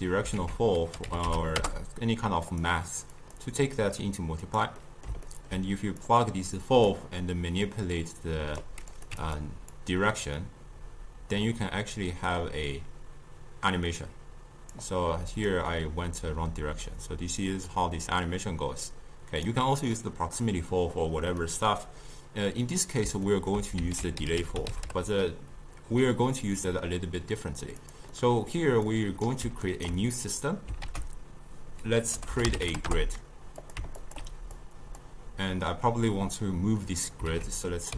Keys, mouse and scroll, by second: 0.4 ctrl+a, 3.2-4.9 drag, 4.9-6.1 middle drag, 6.1 drag, 7.7-9.4 drag, 9.8-12.8 drag, 15.4 click, 16.3-19.3 drag, 20.0-24.0 middle drag, 24.0 ctrl+a, 28.2-28.9 middle drag, 28.9 click, 29.7-30.9 ctrl+right drag, 30.9 ctrl+a, 34.1 alt+shift+click, 34.6-37.4 drag, 37.4 ctrl+a.